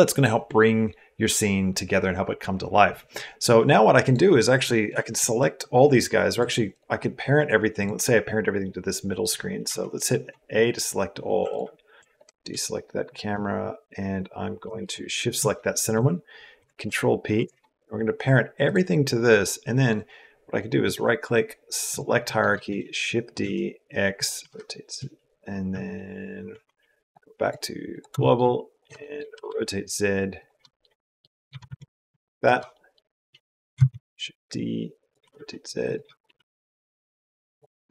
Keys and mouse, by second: 3.8 click, 6.5 click, 9.5 a, 16.4 ctrl+p, 18.4 click, 20.6-21.8 drag, 22.0 middle click, 22.5 shift+d, 24.2 r, 26.9 click, 27.2 click, 28.0 shift+middle click, 28.7 shift+middle click, 29.1 r, 30.5 click, 30.7 middle click, 31.3 g, 32.6 shift+middle click, 33.7 shift+d, 35.0 r, 35.6 click, 35.9 g, 37.6 middle click.